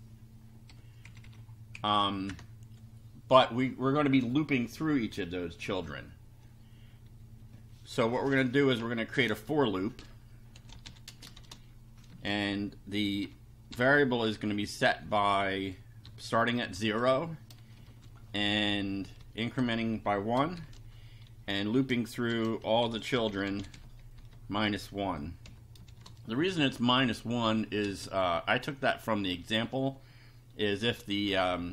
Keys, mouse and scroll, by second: 0.7 ;, 1.1 Left, 1.7 Up, 2.0 End, 2.3 Return, 10.5-12.1 typing, 13.2 i, 13.7 =, 16.1 [, 16.7 0, 17.9 shift+;, 19.2 1, 20.5 shift+;, 22.1-26.7 typing, 27.9 space, 29.6 End.